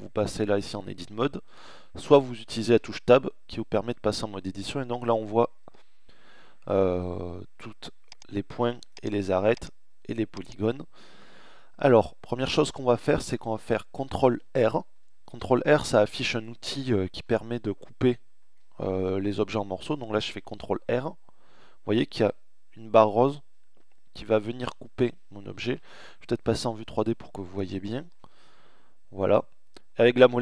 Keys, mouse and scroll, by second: 1.7 Tab, 7.0-13.8 middle drag, 19.5 ctrl+r, 25.8-27.2 middle drag, 27.2 ctrl+r.